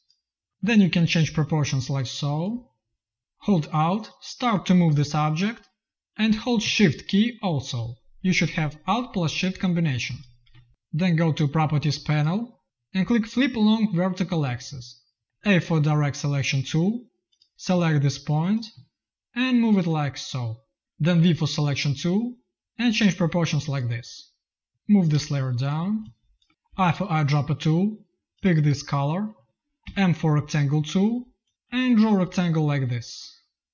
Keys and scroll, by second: 0.5 v, 15.3 a, 21.1 v, 25.1 space, 26.6 i, 29.7 m.